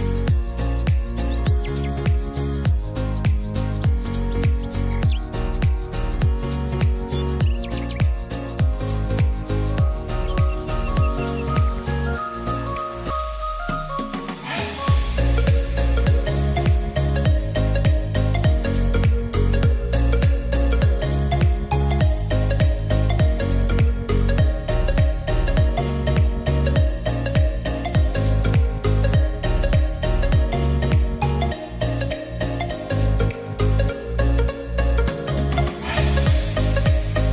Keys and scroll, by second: 4.6-5.9 typing, 26.5 alt+g, 26.9-29.7 typing, 34.6 t, 36.1 e.